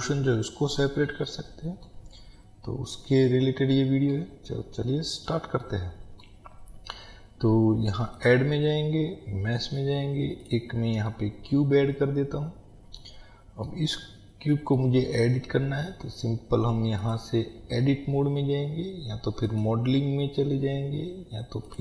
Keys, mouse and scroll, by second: 2.4-3.1 scroll down 2, 8.3-11.2 drag, 11.2-17.1 middle drag, 11.8 scroll up 1, 14.2-14.9 scroll up 1, 17.1-21.8 drag.